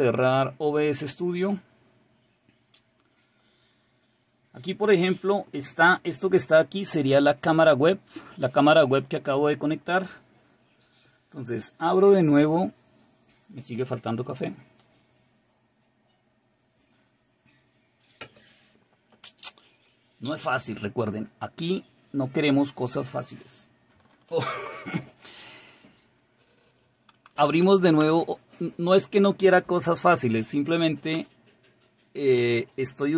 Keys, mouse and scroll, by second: 19.7 click, 31.2 Return.